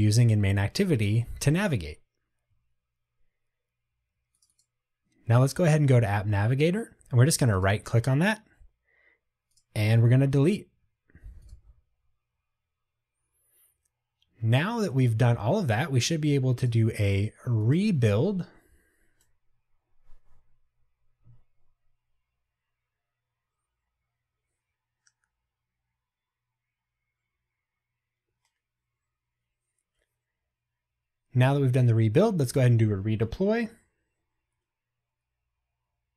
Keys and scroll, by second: 9.8 Delete, 32.6 ctrl+r.